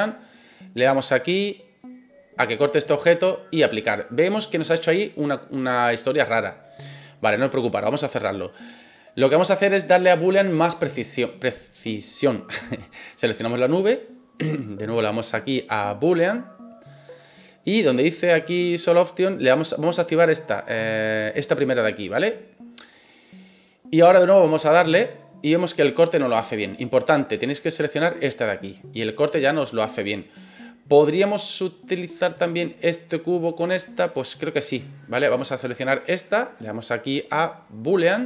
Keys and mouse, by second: 0.5 click, 7.9 click, 9.0 right click, 9.5 right click, 13.1 right click, 13.6 right click, 15.1-17.0 drag, 18.2 click, 20.3 click, 24.1 click, 32.2 right click, 36.7-38.2 drag.